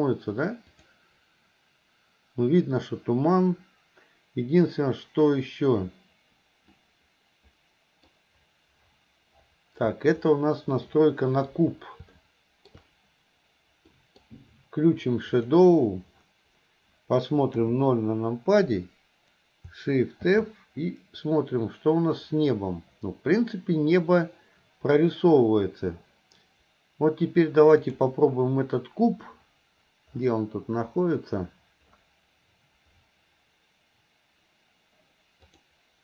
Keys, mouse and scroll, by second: 6.8-8.3 middle drag, 11.0 middle click, 12.3 shift+middle click, 14.1 middle click, 15.7 click, 17.6 KP_0, 20.3 shift+f, 35.5 click.